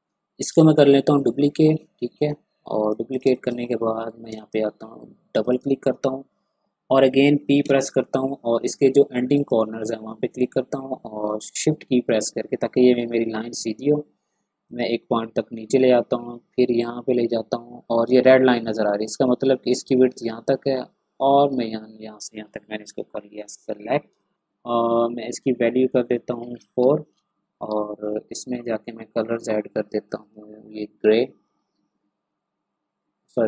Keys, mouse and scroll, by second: 0.0 ctrl+scroll up 1, 0.5 ctrl+space, 0.6-3.1 drag, 3.1 click, 3.2 space, 3.3 click, 3.6-4.1 ctrl+scroll up 1, 4.3 ctrl+space, 4.3 click, 7.0 p, 9.3 click, 14.6 shift+click, 20.0 shift+click, 22.8 v, 23.4 click, 23.8 ctrl+scroll down 1, 24.1 space, 26.6 4, 26.8 Return, 27.5 ctrl+scroll up 1, 28.4 scroll up 1, 29.3 click, 31.4 scroll up 2, 32.3 ctrl+scroll up 1.